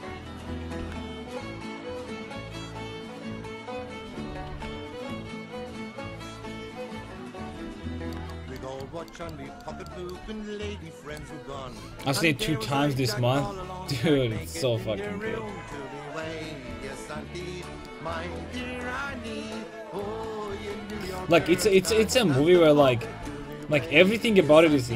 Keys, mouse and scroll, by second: 0.9 s, 4.1-6.2 right drag, 4.3 s, 7.6 a, 10.2 c, 13.4 s, 17.7 click, 17.9-20.4 right drag, 20.4 click, 20.7-22.4 middle drag, 22.4 a, 23.2 c.